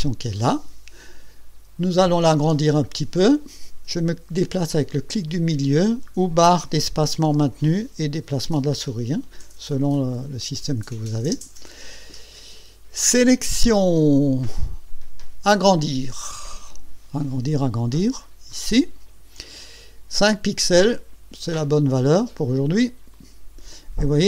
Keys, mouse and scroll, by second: 2.8 ctrl+scroll up 2, 4.3 scroll down 2, 4.6-6.2 middle drag, 7.4 space, 13.5 click, 18.5 click, 23.1 click.